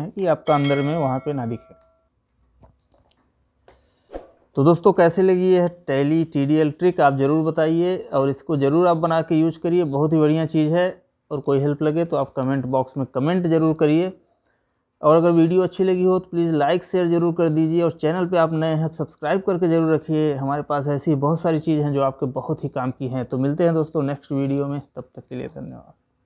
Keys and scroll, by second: 1.3 Escape.